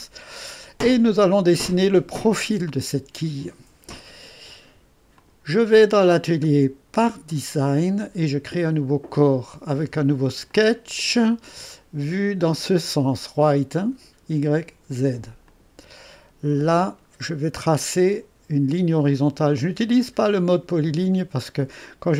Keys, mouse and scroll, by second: 0.3-3.1 right drag, 5.2-8.0 drag, 8.7 click, 10.5 click, 12.5 click, 15.5-22.1 drag.